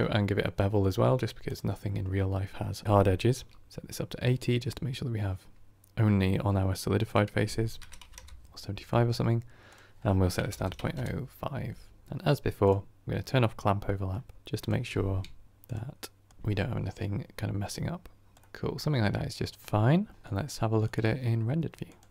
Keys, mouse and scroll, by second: 1.7-12.8 drag, 15.4-18.4 drag, 18.4-21.0 middle drag, 21.0 click, 21.8 click.